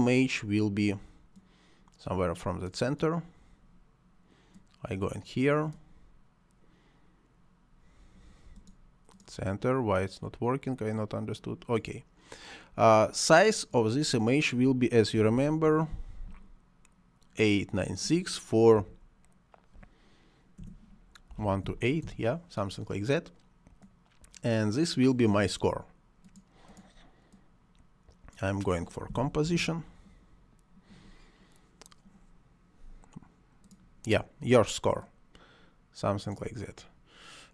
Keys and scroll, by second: 15.2 8, 15.5 9, 15.7 6, 18.8 2, 20.6 BackSpace, 21.3 1, 21.4 2, 21.7 8, 22.0 Return, 29.2 c, 29.5 o.